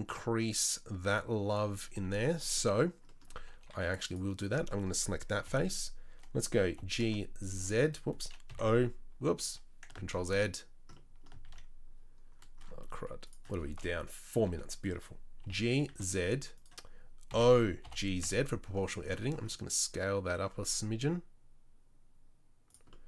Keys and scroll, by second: 1.8 Tab, 2.0 Tab, 3.4 2, 3.7 3, 5.4 KP_3, 6.7 g, 9.7 i, 11.4 ctrl+z, 14.3 KP_3, 15.4 g, 17.3 o, 17.8 g.